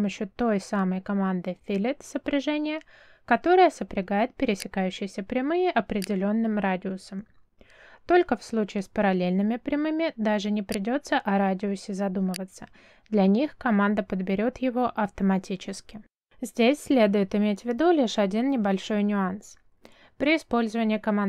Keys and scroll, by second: 8.6 f, 9.3 space.